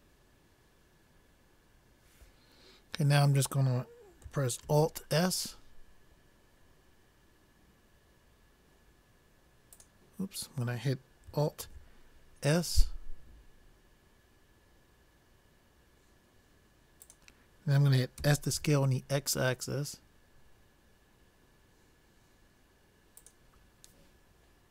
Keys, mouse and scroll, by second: 11.7 alt+s, 18.5 s.